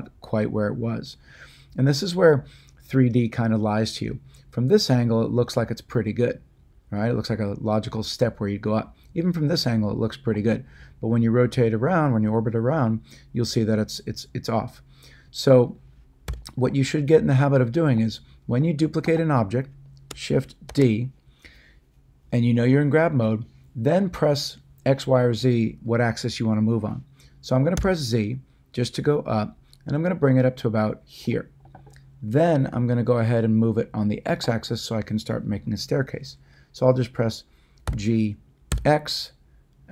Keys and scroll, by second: 16.2 x, 20.6 d, 27.7 z, 37.8 g, 38.7 x.